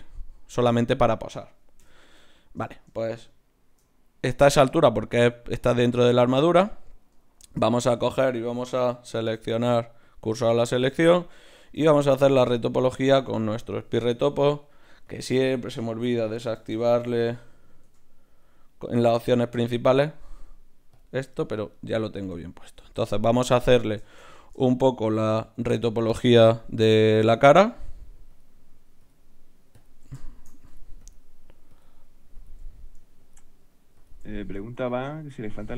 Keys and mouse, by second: 1.8 KP_1, 3.6 shift+c, 7.2-8.4 middle drag, 8.4 right click, 9.2-10.7 drag, 9.2 shift+s, 10.7-12.4 middle drag, 11.7 t, 12.7 middle click, 12.7-14.5 drag, 14.3 right click, 14.5 middle click, 15.0 click, 15.0-16.7 right drag, 16.7 click, 16.7 KP_0, 18.3-20.0 drag, 19.7 right click, 20.0 middle click, 20.9 click, 20.9-22.6 right drag, 21.7 click, 22.6 ctrl+Tab, 27.3 click, 27.3-35.7 right drag, 32.6-35.7 drag.